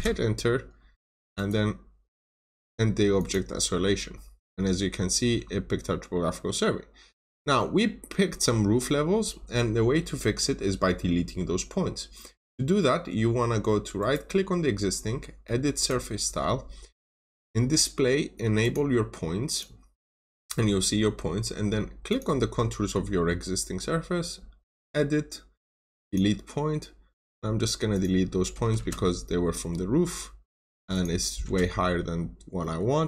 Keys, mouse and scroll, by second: 1.3 right click, 2.1 click, 4.3-4.7 scroll up 1, 5.0 middle click, 5.4-6.1 scroll down 1, 6.1 middle click, 6.9 scroll up 1, 7.5 middle click, 8.1-8.7 scroll up 1, 13.9 right click, 15.7 click, 28.7 Return, 29.2 scroll down 1, 29.4 middle click, 29.9 scroll up 1, 30.8 click, 31.4 Return, 32.1 scroll down 1, 32.5 middle click, 32.8-33.0 scroll up 1.